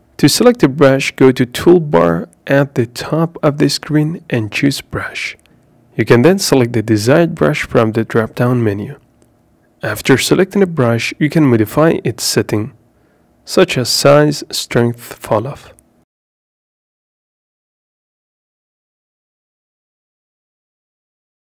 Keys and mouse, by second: 0.9 click, 2.0-6.2 drag, 12.3-13.9 drag, 16.9-18.4 drag, 19.1 click.